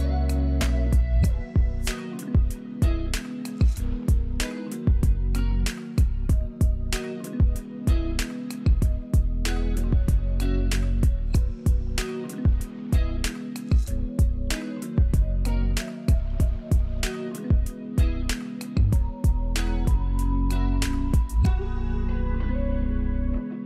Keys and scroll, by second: 0.7 alt+space, 6.4 Delete, 6.6 Delete, 7.6 z, 9.3 space, 11.7 space, 13.1 space, 14.5 space, 22.6 alt+space, 23.1 alt+space.